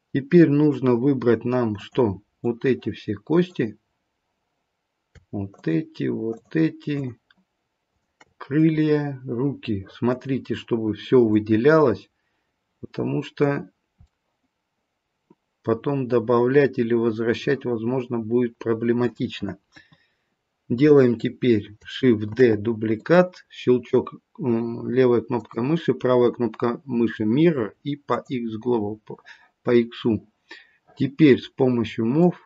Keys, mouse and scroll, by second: 1.7 click, 2.3 click, 6.3 shift+click, 7.9 shift+click, 8.6 middle click, 10.3-10.9 scroll up 1, 10.9-11.3 scroll up 2, 11.3 middle click, 13.5-14.1 scroll down 2, 14.1 middle click, 19.7 KP_1, 22.3 shift+d, 28.2 right click, 28.9-31.9 scroll down 3, 32.1 click.